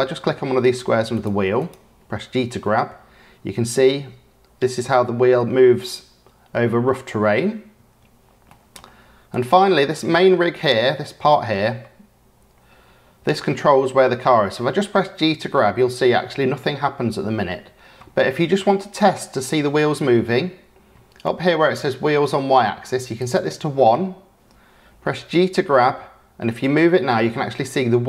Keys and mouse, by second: 0.6 click, 1.6 click, 2.4 g, 8.4 click, 9.3 click, 9.9-10.3 drag, 11.0 click, 13.7 g.